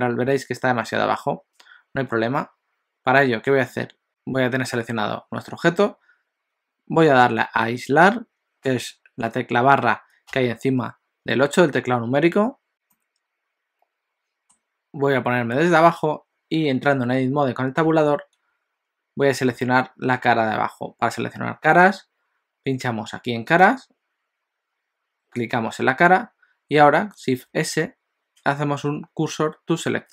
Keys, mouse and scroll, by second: 10.3 KP_Divide, 12.7 scroll down 3, 13.0 middle click, 17.9 Tab, 23.7 click, 25.5 click, 27.9 shift+s.